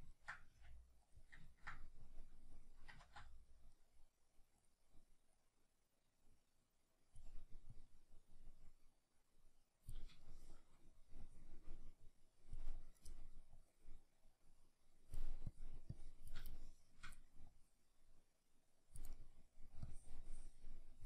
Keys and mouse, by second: 0.5 f, 1.1 click, 1.5 ctrl+middle click, 2.1-3.3 drag, 3.1 ctrl+z, 3.3-4.6 middle drag, 4.6 click, 4.8 middle click, 5.4-10.3 drag, 10.3-11.3 shift+middle drag, 11.3-12.7 drag, 12.7 middle click, 13.6-16.5 drag, 16.5-17.5 shift+middle drag, 17.5-19.2 drag, 19.2 middle click, 19.8-21.0 drag.